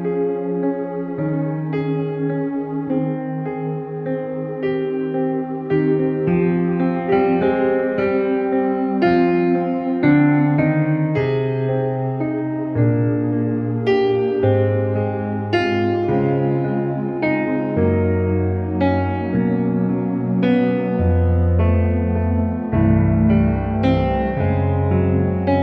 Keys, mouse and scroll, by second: 0.9 ctrl+d, 1.5 ctrl+-, 4.4 space, 4.6 click, 4.7-5.0 space, 8.5 ctrl+shift+e, 10.3 click, 10.6 c, 12.3 click, 14.0-14.4 drag, 17.1-18.3 typing, 18.1-20.0 drag, 20.0 x, 20.8 c, 21.1-21.8 click, 24.0 click.